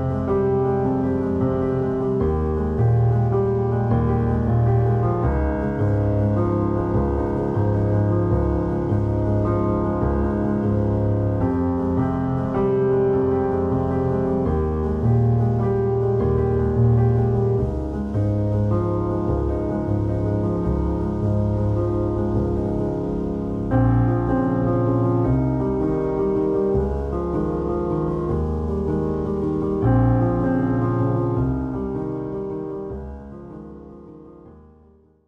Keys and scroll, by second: 1.2 b, 4.0 5, 5.2 `, 5.2 s, 7.2 BackSpace, 8.6 1, 8.9 alt+z, 10.7 Tab, 11.2 ctrl+z, 12.7 x, 14.3 }, 14.8 x, 15.9 r, 17.6 r, 21.0 a, 21.4 m, 22.6 Tab, 23.3 alt+shift+z.